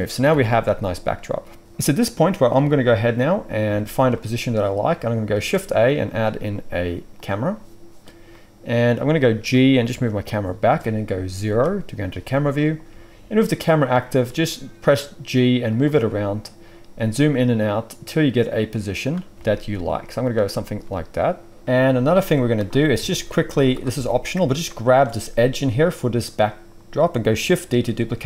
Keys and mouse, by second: 0.2-5.1 alt+right drag, 0.3 alt+a, 5.1-22.0 shift+drag, 5.3 shift+a, 9.4 g, 11.4 KP_0, 12.8 g, 14.1 g, 17.0 g, 19.3 g, 20.8 g, 22.0-23.2 shift+middle drag, 22.9 Tab, 23.2 click, 23.4-27.2 right drag, 23.4 z, 23.9 alt+a, 24.6 alt+shift+click, 27.2-28.2 shift+drag, 27.6 shift+d.